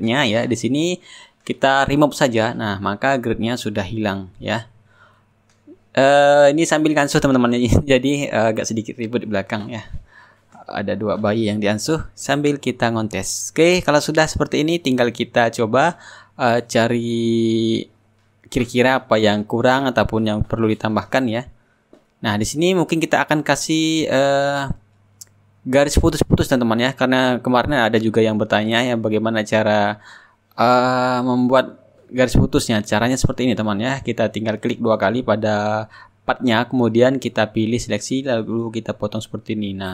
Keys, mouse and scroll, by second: 0.0 click, 2.4-3.9 drag, 3.9-5.5 right drag, 4.3 shift+click, 5.8-8.2 drag, 8.7-10.4 shift+drag, 12.0-13.3 middle drag, 13.9 middle click, 14.7 click, 18.0-21.5 middle drag, 21.7 click, 23.0 middle click, 23.6 click, 25.4 click, 27.5-30.9 drag, 31.0 click, 33.3 click, 34.6-37.1 drag, 37.2 click, 39.0 middle click, 39.4 click, 39.4 right click.